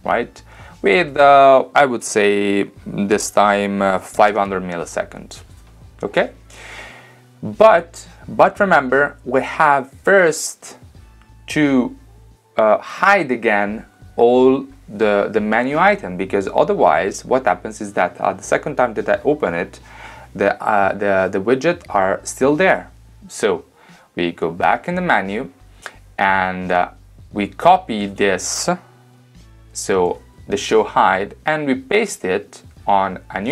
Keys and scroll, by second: 3.8-4.8 typing, 29.9 super+c.